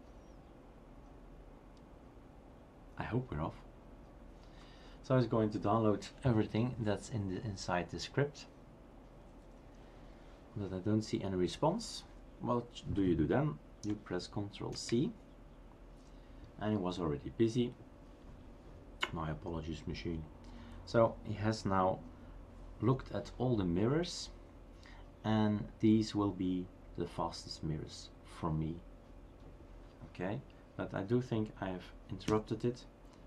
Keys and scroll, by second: 14.7 ctrl+c, 32.3 Up.